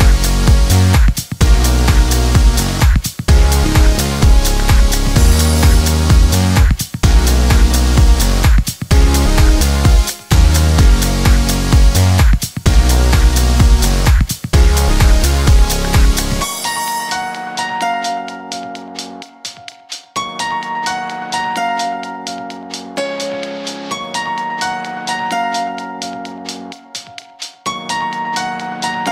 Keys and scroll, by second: 2.2 1, 2.9 Tab, 10.5 0, 16.6 1, 18.7 0, 19.6 Return.